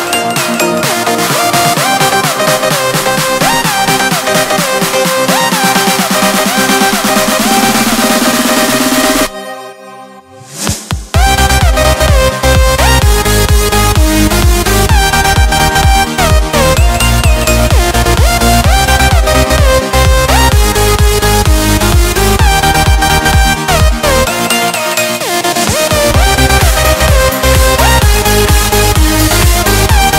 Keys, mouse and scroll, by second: 0.0 click, 1.7 click, 4.0 click, 5.4 click, 6.6 Escape, 9.8 click, 11.4 click, 13.2 right click, 14.1 Escape, 16.9 click, 18.1 click, 20.6 4, 21.2 0, 21.6 Return, 23.0 click, 24.8 1, 25.3 0, 25.7 Return, 26.9-27.7 scroll down 1, 27.7 click, 29.4 1, 29.9 0.